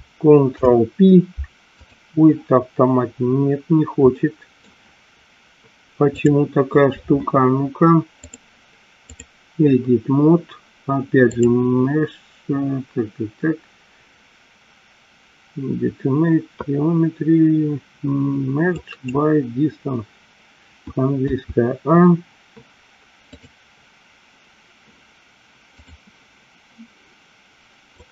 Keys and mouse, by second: 0.6 ctrl+p, 4.3 middle click, 6.2 click, 8.3-9.4 drag, 11.4-19.2 drag, 21.3 a, 23.5 click, 26.1-28.1 drag.